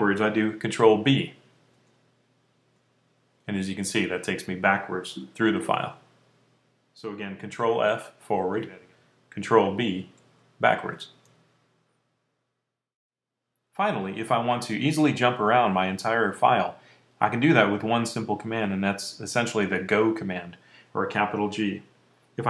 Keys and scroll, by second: 1.6 b, 2.5 b, 3.3 b, 5.0 b, 7.6 ctrl+f, 8.2 ctrl+f, 9.6 b, 10.1 b, 10.7 b.